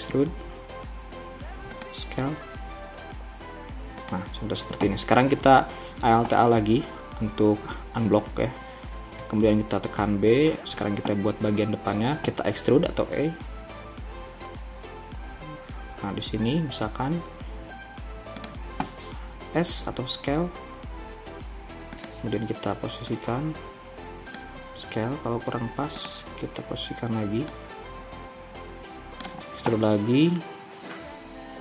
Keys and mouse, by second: 0.0 e, 2.3 s, 8.2 alt+a, 9.2 b, 12.8 e, 19.5 s, 25.0 s, 28.0-29.8 drag, 29.8 e.